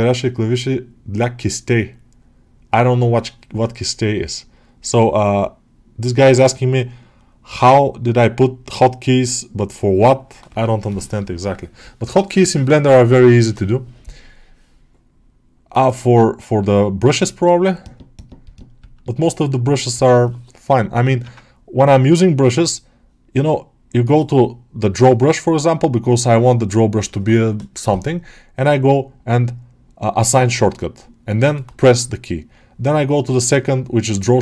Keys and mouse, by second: 21.3 ctrl+Tab, 24.0-34.4 right drag.